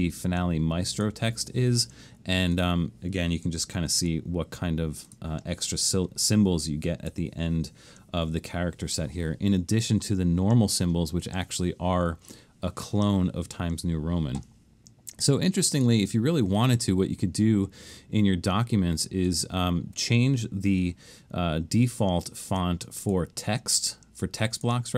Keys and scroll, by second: 3.8 alt+shift+super+s.